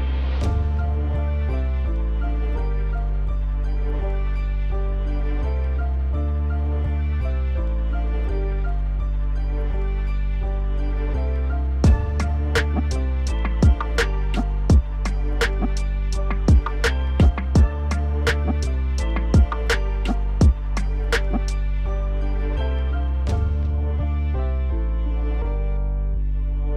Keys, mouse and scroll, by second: 0.8 alt+s, 1.3 middle click, 2.0 click, 2.8 KP_1, 3.9 e, 8.4-9.4 middle drag, 9.4-9.7 scroll up 2, 9.7 middle click, 10.5 click, 11.4 e, 13.4 KP_1, 14.9-15.2 scroll down 1, 15.2 KP_7, 15.5-16.0 scroll down 1, 16.0 a, 16.4 r, 17.7 KP_1, 18.2 scroll up 3, 18.4 shift+middle click, 19.0 click, 19.2-19.7 scroll up 2, 19.7 click, 20.3 shift+z, 20.6 click, 21.0 shift+z, 22.0 g, 22.7 s, 23.8 g, 25.8 e, 26.6 middle click.